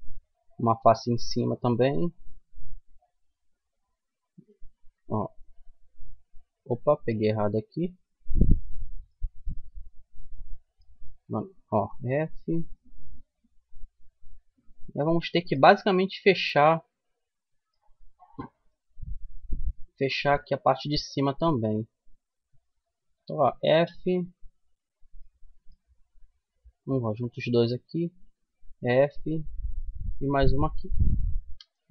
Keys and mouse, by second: 1.4 f, 2.1-4.6 middle drag, 4.6-5.9 right drag, 5.9-9.7 middle drag, 11.0 f, 13.7 f, 15.3 middle click, 15.5 middle click, 15.7-16.8 middle drag, 17.7-19.0 middle drag, 20.9-22.8 middle drag, 22.8 click, 22.8 f, 23.7 middle click, 25.0 middle click, 25.7-28.0 right drag, 28.0 f, 31.1 f, 31.4 middle click.